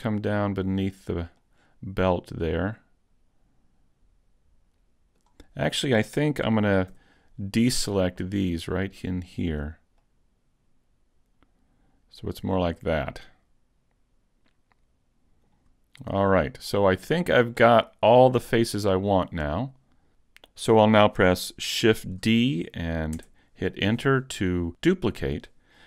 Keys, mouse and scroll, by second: 1.1 right click, 1.4 middle click, 5.5-6.9 scroll down 1, 6.9 c, 9.7 right click, 10.0 middle click, 16.0 shift+middle click, 16.7-17.0 scroll up 3, 17.0 shift+middle click, 17.6 middle click, 22.1 shift+d.